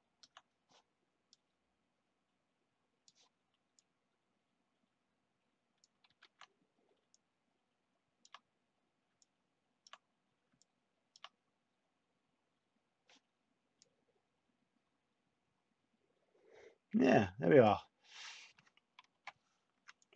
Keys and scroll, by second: 6.0 ctrl+z, 19.1 /.